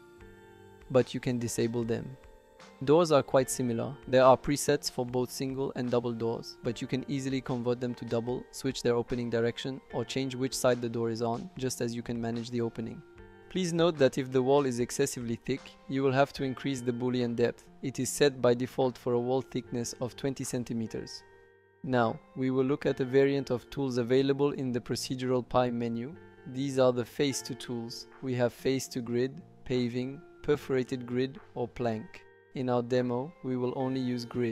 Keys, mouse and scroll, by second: 1.7 click, 8.7 click, 9.5 click, 9.9 click, 10.2 click, 10.4 click, 10.7 click, 11.7 click, 12.3 click, 12.9 click, 14.1-15.9 drag, 22.2-34.5 drag, 22.6 typing.